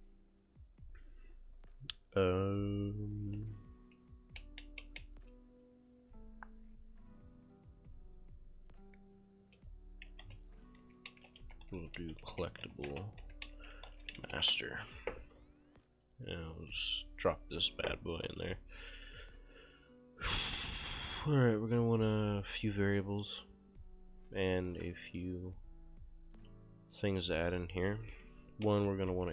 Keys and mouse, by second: 10.2-14.8 typing, 16.1 click, 17.4 right click, 17.7 ctrl+space, 18.4 click, 24.8 click, 26.4 click, 28.9-29.3 typing.